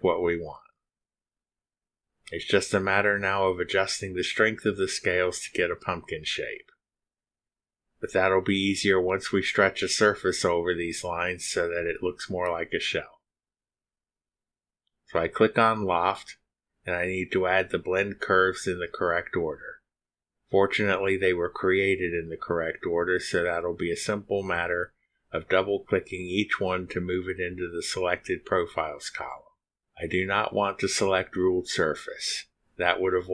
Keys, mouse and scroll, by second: 3.3-7.8 drag, 16.5 click, 17.9 click, 19.2 click, 20.8 click.